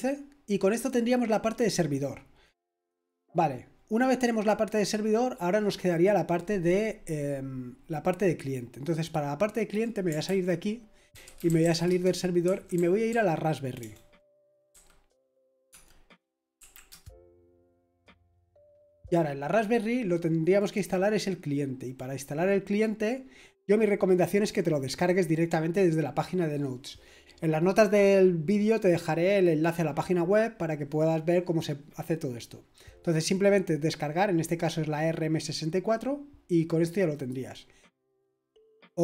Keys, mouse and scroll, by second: 3.0 click, 9.0 click, 10.2 ctrl+c, 10.8-15.7 typing, 16.5 Right, 16.9 Return, 18.0 Return, 20.3-21.5 typing, 20.6 click, 21.9 click, 37.1 click, 38.1 click.